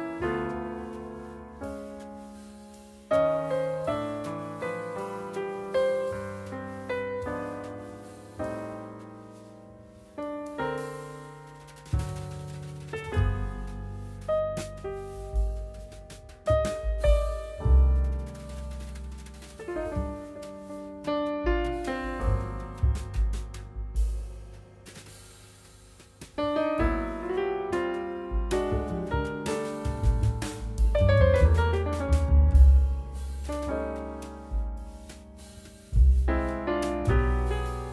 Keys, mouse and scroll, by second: 3.0 middle click, 3.2 scroll down 1, 3.5 middle click, 3.7 scroll up 1, 27.0 scroll down 1, 28.2 middle click, 30.5-31.2 scroll up 1, 32.5 scroll down 1, 33.1 scroll up 1, 33.6 middle click, 33.9 scroll down 1, 34.0-34.4 scroll up 1.